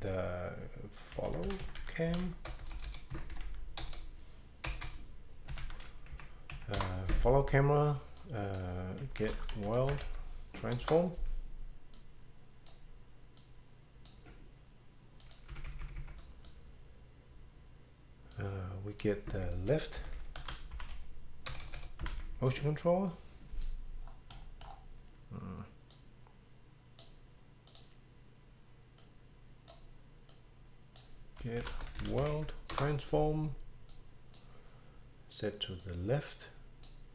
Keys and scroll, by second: 0.9-6.1 typing, 6.8 Up, 6.8 Return, 8.8-10.5 typing, 10.8 Return, 13.9 typing, 15.5 Right, 15.7 Right, 15.8 Right, 16.0 Right, 19.7-22.5 typing, 31.1-32.8 typing, 35.3 typing.